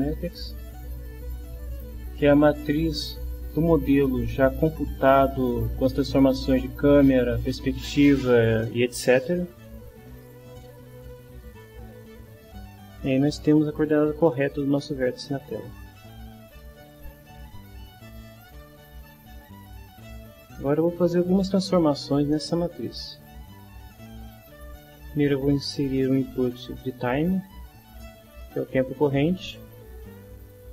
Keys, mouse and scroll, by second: 0.2-2.6 drag, 4.8-7.4 drag, 10.2-11.8 middle drag, 12.7-14.3 drag, 14.3-16.0 middle drag, 16.9 click, 18.6-19.8 drag, 20.5 click, 22.3-23.8 middle drag, 24.2 right click, 27.0 click, 28.1-29.8 drag.